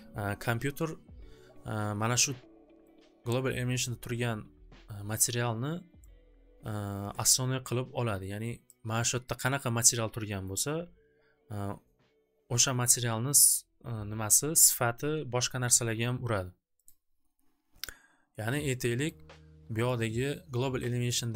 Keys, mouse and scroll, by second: 6.1-8.0 drag, 8.8 click, 10.4 click, 14.2-15.6 drag, 17.0-18.2 drag, 18.3 click, 18.4 click, 19.2 click, 20.0 click, 21.0 click.